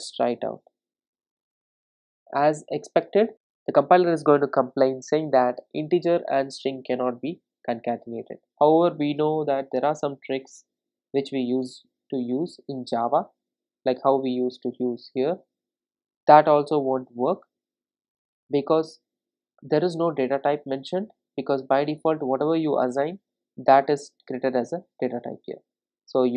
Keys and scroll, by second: 0.2 ctrl+r, 14.4 ctrl+r.